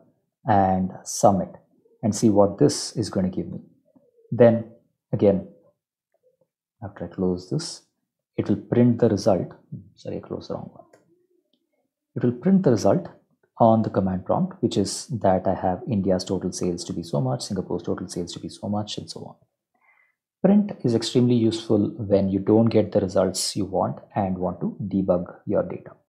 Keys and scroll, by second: 0.0-0.8 typing, 1.9 Home, 2.2 ctrl+s, 3.2 Up, 3.5 Return, 6.7 Up, 6.9 Return, 10.7 Up, 10.9 Return.